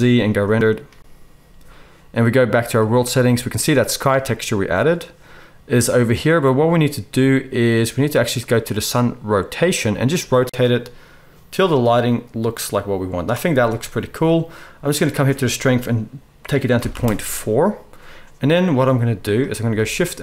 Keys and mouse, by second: 2.0 middle click, 2.9 right click, 9.6-12.3 middle drag, 11.5 click, 11.5 right click, 19.6 shift+a.